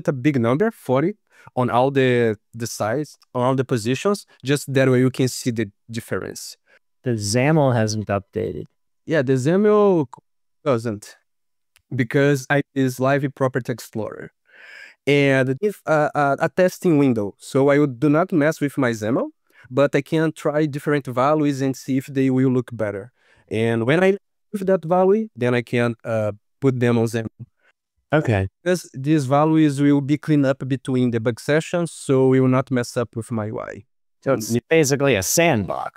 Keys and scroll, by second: 1.3 ctrl+s.